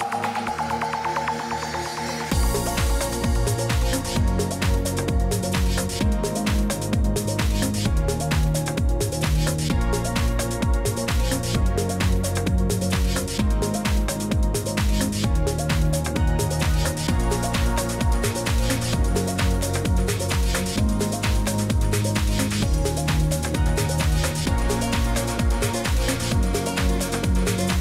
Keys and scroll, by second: 5.7 ctrl+v, 7.0-7.6 z, 11.4 ctrl+c, 12.4 ctrl+v, 22.3 ctrl+c, 23.9 ctrl+v, 24.2 i, 27.3 ctrl+shift+4.